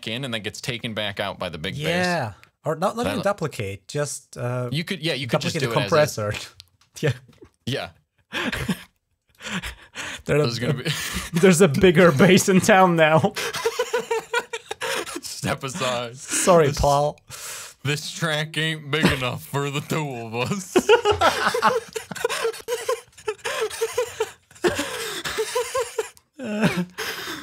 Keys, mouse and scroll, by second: 4.5 click, 6.6 ctrl+z, 7.5 z, 9.1 click, 10.3 right click, 11.4 click, 13.0 right click, 14.6 click, 15.4 right click, 16.3 click, 17.2 click, 17.3 click, 19.1 click, 19.8 click, 20.2 click, 20.3 click, 22.4 click, 23.2 click.